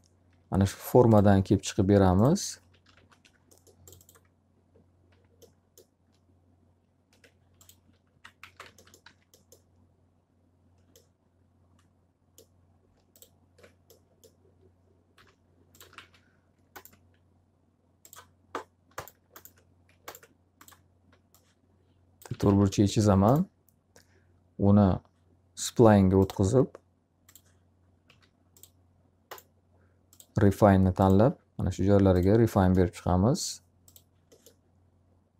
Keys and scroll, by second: 0.5 alt+r, 2.2-3.4 typing, 7.6 x, 8.5 z, 8.6 alt+a, 9.0 q, 14.7-16.4 typing, 21.9 s, 22.5 w, 27.6 s.